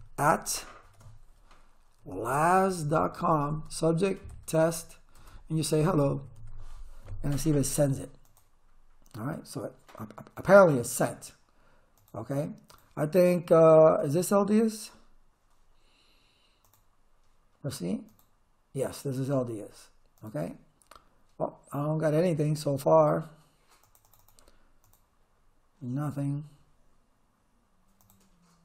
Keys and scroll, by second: 0.9-6.9 typing.